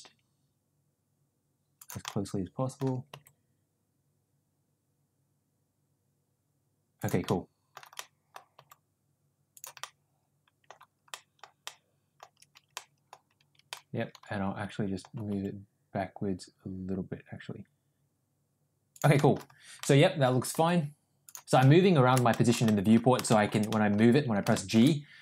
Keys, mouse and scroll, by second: 2.0 middle click, 3.1 g, 7.2-7.7 middle drag, 7.9 middle click, 8.5 g, 9.8-10.5 middle drag, 11.2 middle click, 11.6-12.1 middle drag, 12.7-13.0 middle drag, 13.6-15.1 middle drag, 15.2 g, 19.2 middle click, 19.7 middle click, 20.4 g, 21.7-22.1 middle drag, 22.4 middle click, 22.6-22.9 middle drag, 23.2 middle drag, 23.7 middle click, 24.6 shift+middle click.